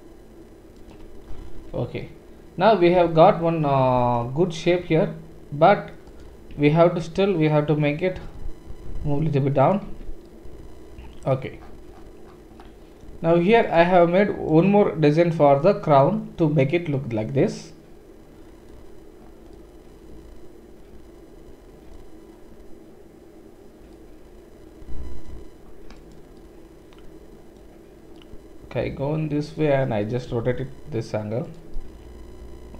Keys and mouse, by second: 1.6 Tab, 6.0 click, 6.2-14.2 middle drag, 6.5 Tab, 8.2 g, 9.9 Tab, 14.2 click, 14.3-26.0 middle drag, 26.0 click, 29.2-32.7 middle drag, 30.3 r.